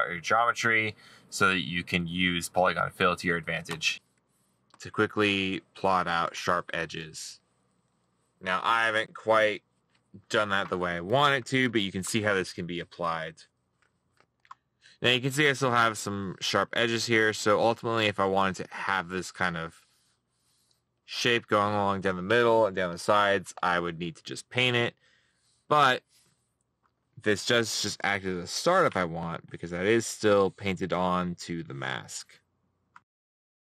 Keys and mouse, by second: 2.0 middle click, 4.3 middle click, 5.7 middle click, 13.5 middle click, 14.9 middle click, 33.2 middle click.